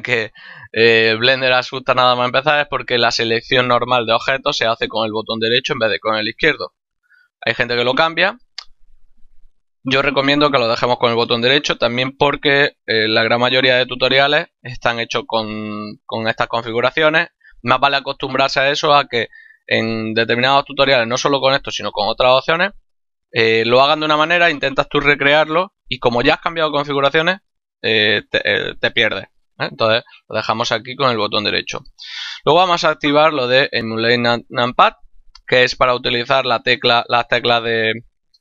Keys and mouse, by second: 32.6 click.